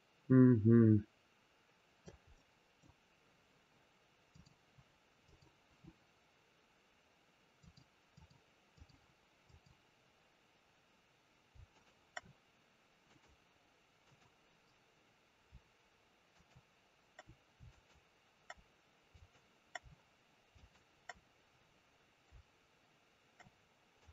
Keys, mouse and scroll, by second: 2.3 middle click, 4.2 click, 5.1 click, 7.5 click, 8.0 click, 9.3 click, 11.6-12.1 shift+click, 12.9 click, 21.4-22.9 scroll down 4, 23.9 click.